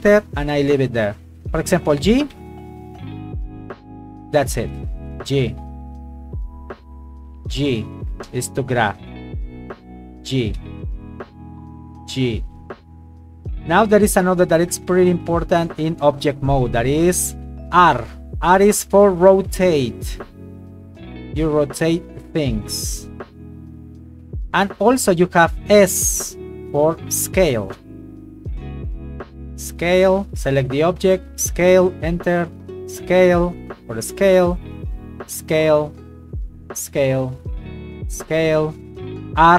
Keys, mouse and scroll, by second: 0.0 Return, 1.4 right click, 2.3 g, 3.8 click, 4.6 shift+middle click, 5.1 right click, 5.7 g, 6.4 click, 7.2 g, 8.5 right click, 9.1 g, 9.6 click, 10.6 g, 11.1 click, 11.9 g, 12.6 click, 13.1 right click, 18.4 r, 24.3 Escape, 27.7 s, 30.0 Escape, 30.4 right click, 30.8 s, 31.4 click, 32.3 right click, 32.6 s, 33.9 click, 34.6 right click, 35.7 click, 36.2 s, 36.8 click, 37.3 right click, 37.5 s, 38.3 click, 39.4 r.